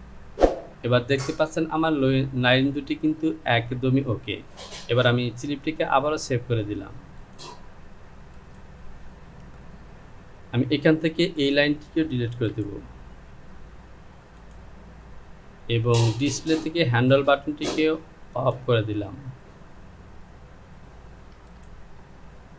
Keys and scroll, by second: 12.4 Delete, 21.4 Delete.